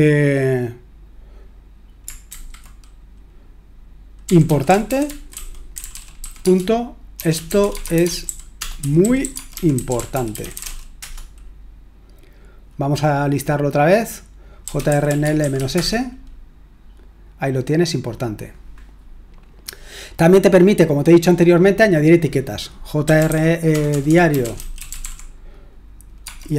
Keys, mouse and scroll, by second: 2.3 typing, 4.0-11.1 typing, 14.4-16.0 typing, 20.1-22.0 scroll down 1, 22.0-23.1 scroll down 1, 22.8-26.2 typing.